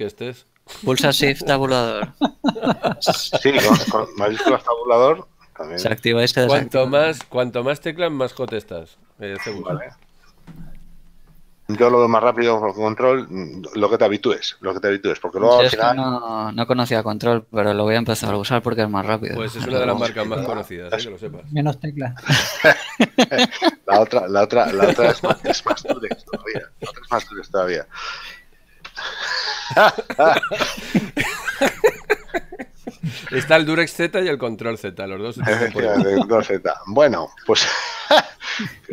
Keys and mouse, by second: 4.6 shift+Tab, 8.9 shift+Tab, 29.0 KP_7, 31.6 Tab, 32.3 shift+middle click, 35.6 click, 37.3 middle click.